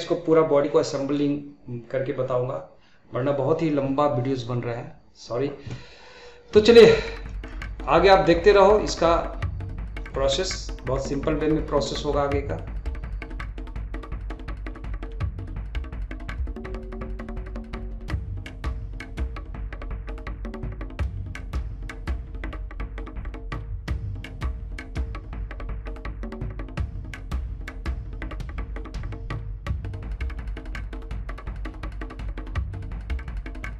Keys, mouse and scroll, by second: 6.7-11.7 middle drag, 13.5 middle click, 13.7 scroll up 3, 13.9-14.3 shift+middle drag, 14.3-14.7 scroll up 2, 14.4 shift+middle click, 14.7 shift+middle drag, 14.9 click, 15.1 Tab, 15.2 middle click, 15.4 scroll up 3, 15.6 shift+middle click, 15.9 click, 16.0 middle click, 16.3 shift+click, 16.5 middle click, 16.8 shift+click, 16.9 middle click, 17.1 shift+click, 17.2 scroll down 3, 17.3 middle click, 17.5 shift+click, 17.6 middle click, 18.1 g, 19.0 scroll down 2, 19.0 middle click, 19.3 scroll up 2, 19.4 shift+middle click, 19.9 scroll up 1, 19.9 scroll down 1, 20.0 shift+middle click, 20.2 scroll up 1, 20.3 shift+middle click, 20.5 click, 20.6 middle click, 21.0 g, 21.4 scroll down 2, 21.4 middle click, 21.9 scroll up 3, 22.0 shift+middle click, 22.7 shift+middle click, 23.1 click, 23.2 middle click, 23.8 middle click, 24.4 middle click, 24.6 click, 25.0 middle click, 25.6 scroll down 1, 25.7 middle click, 25.9 click, 26.3 middle click, 26.8 middle click, 27.4 click, 27.7 middle click, 28.7 scroll down 1, 28.7 middle click, 28.9 click, 29.2-30.9 click, 33.5 middle click, 33.7 scroll down 3.